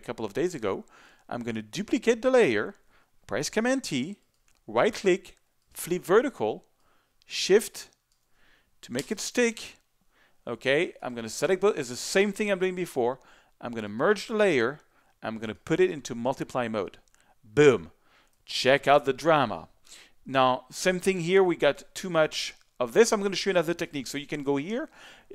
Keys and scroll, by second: 3.4 super+t, 9.0 shift+Return, 18.3 z.